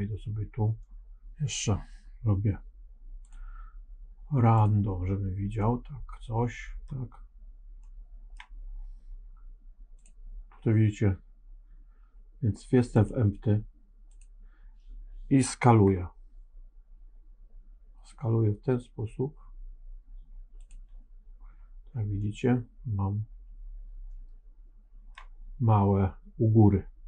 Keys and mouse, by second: 3.3-4.9 drag, 5.5-6.8 middle drag, 7.7 middle click, 9.9 click, 14.0 click, 15.6 s, 22.1-25.0 middle drag.